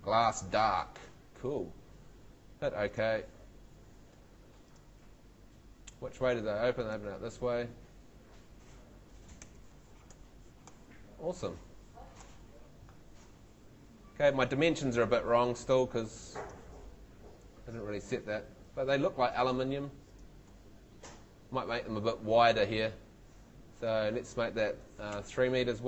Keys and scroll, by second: 9.4 F3, 16.8 a, 17.4 w, 18.5 Escape, 25.1 3.